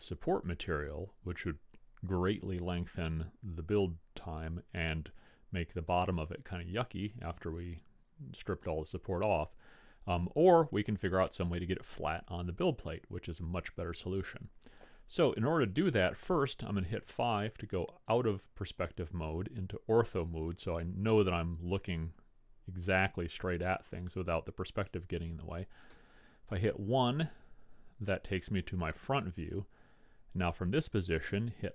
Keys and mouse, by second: 10.4-14.7 middle drag, 17.1 KP_5, 26.2 KP_1.